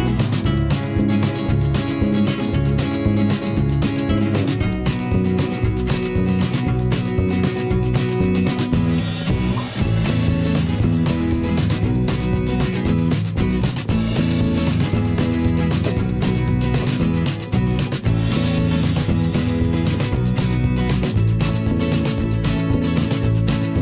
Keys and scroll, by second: 2.9 o, 3.6 p, 9.8 v, 10.3 i, 10.8 v, 15.4 ctrl+d, 21.8 Delete.